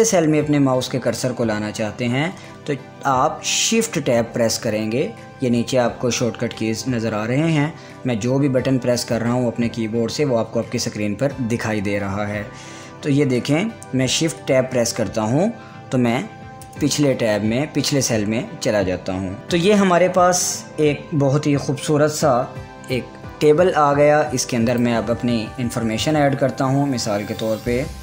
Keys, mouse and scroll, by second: 4.3 shift+Tab, 14.9 shift+Tab, 17.1 shift+Tab, 25.2 shift+Tab, 27.0 click.